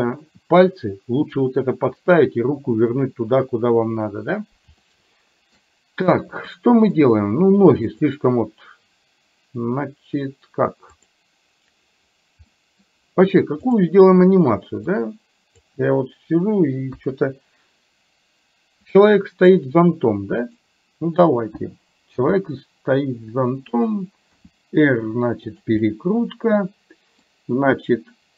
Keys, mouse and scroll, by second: 4.8 shift+middle click, 6.5 middle click, 8.0 click, 10.9 click, 12.5 middle click, 13.8 click, 15.0 click, 17.0 KP_1, 20.5 click, 22.3 g, 24.5 r, 25.9-27.3 middle drag.